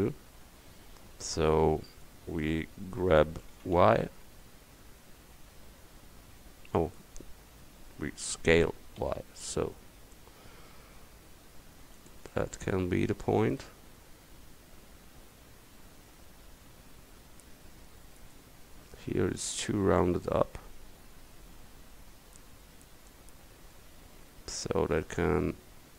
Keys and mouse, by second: 3.5 g, 8.7 s, 13.2 Tab, 17.6 middle click, 19.7 Tab, 24.6 a.